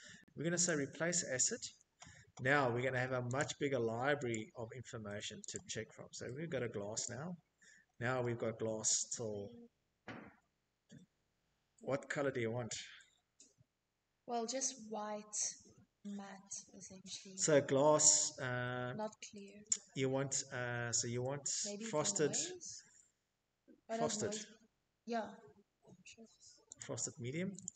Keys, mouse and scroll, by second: 0.5 click, 1.5 click, 2.7 click, 4.2 click, 5.3-6.7 scroll, 7.3-7.7 scroll, 9.0-9.4 scroll, 9.9-10.8 scroll, 10.8 scroll, 10.9 middle click, 11.9 middle click, 12.0 middle click, 12.2 middle click, 12.6 middle click, 13.3 middle click, 13.4 middle click, 13.9 middle click, 14.5 middle click, 17.2-18.1 scroll, 23.9 click, 24.8 click, 25.0 click.